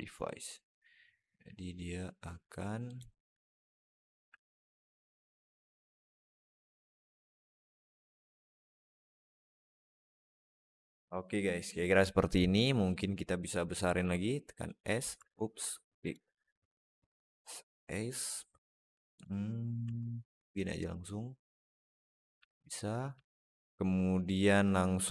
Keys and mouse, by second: 0.5-2.7 drag, 3.8 shift+click, 4.7 click, 6.0 click, 6.5 click, 7.8-8.9 shift+drag, 9.3 alt+middle click, 9.9 Tab, 10.3 alt+middle drag, 11.2-12.7 middle drag, 13.9 s, 15.0 Tab, 15.4 s, 16.4 a, 16.8 s, 19.7 Tab, 20.1 s, 22.3 alt+middle drag, 23.1-23.4 alt+middle drag, 24.8 click.